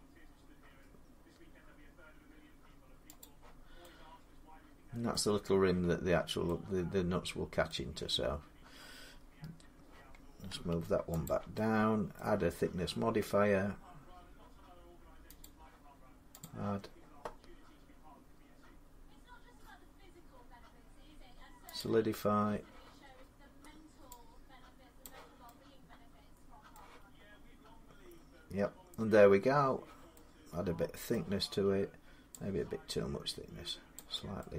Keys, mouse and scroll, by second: 2.0 Escape, 3.0 click, 4.9 middle click, 7.4 middle click, 7.9 scroll down 2, 10.5 Tab, 11.1 click, 11.8 scroll up 1, 12.0 middle click, 15.2 click, 16.2 click, 21.6 click, 24.8 click, 26.5 middle click, 30.0-33.7 middle drag, 33.7 click.